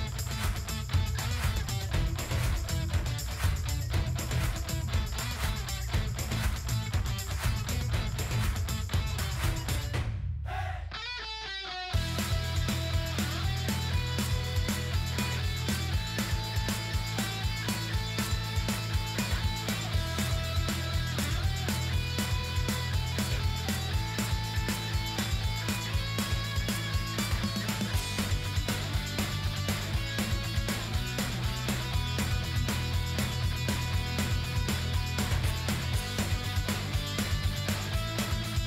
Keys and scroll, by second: 11.9 ctrl+g, 14.9 shift+p, 30.5 ctrl+g.